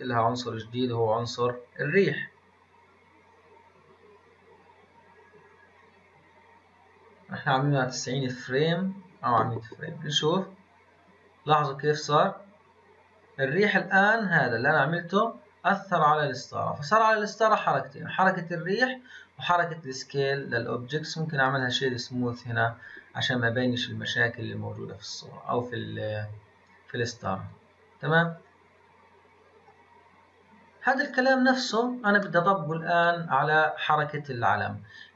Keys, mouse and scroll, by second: 10.2-13.2 drag, 17.6-20.4 middle drag, 20.4-22.2 right drag, 22.2-23.7 scroll up 3, 23.7-26.8 drag, 27.5-30.5 drag, 32.2-35.1 middle drag.